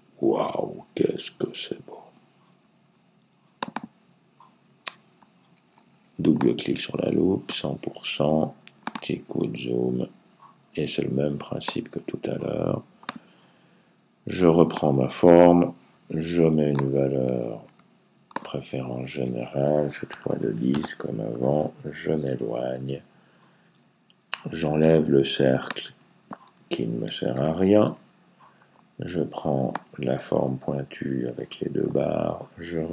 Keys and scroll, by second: 19.7-20.6 typing, 21.7 Right.